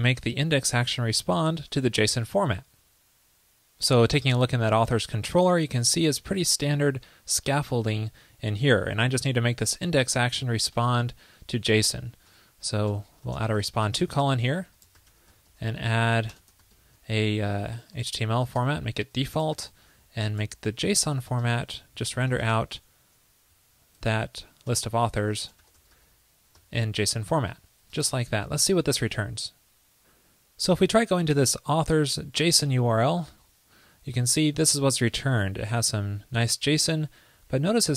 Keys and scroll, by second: 18.7 super+Return, 25.3 ctrl+i, 27.4 ctrl+l, 27.8 super+c, 27.8 super+s.